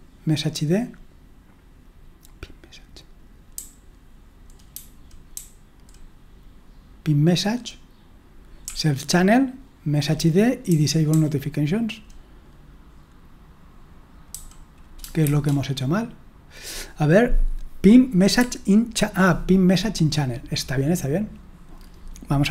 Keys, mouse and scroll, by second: 4.2 typing, 9.3-12.0 typing, 15.0-15.8 typing, 19.0-19.9 typing.